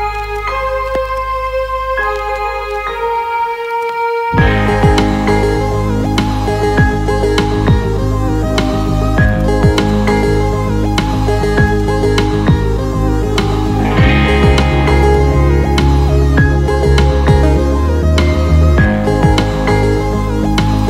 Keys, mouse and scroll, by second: 0.1-1.2 drag, 13.0 shift+a, 17.4-19.9 drag, 18.3 KP_0, 19.4 KP_0.